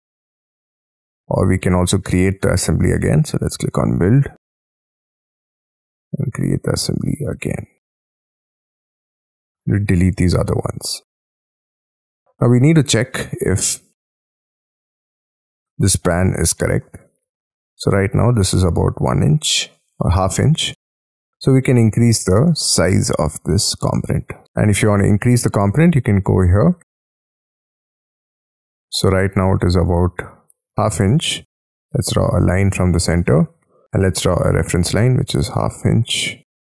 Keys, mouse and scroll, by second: 0.5-1.4 scroll down 19, 1.4 Escape, 8.4 space, 8.7 Escape, 9.3 middle click, 9.9 Delete, 10.3 Delete, 10.8 middle click, 11.8-12.4 scroll up 13, 12.4 middle click, 13.4 scroll down 4, 13.7-14.4 scroll up 11, 14.4 middle click, 16.5 middle click, 16.9 t, 17.1-18.3 scroll up 6, 19.6 Escape, 20.1 t, 20.7 space, 21.5-22.5 scroll down 13, 22.5 middle click, 24.5 scroll down 10, 24.7 scroll up 6, 24.9 scroll down 1, 25.1-26.1 scroll up 16, 26.1 double click, 26.3 double click, 26.7 double click, 27.8 scroll up 6, 28.1 middle click, 28.9-29.2 scroll up 2, 31.1 space, 31.9 l, 33.2 space, 33.3 t, 33.8 Escape, 35.3 1, 36.0 /, 36.5 2.